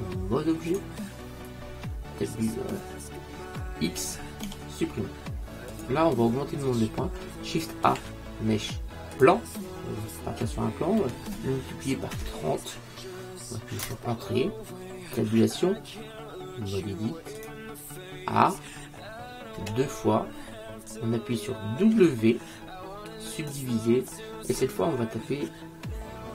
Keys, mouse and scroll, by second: 4.5 x, 8.0 shift+a, 11.1 s, 15.3 Tab, 18.7 a, 19.7 a, 21.9 w.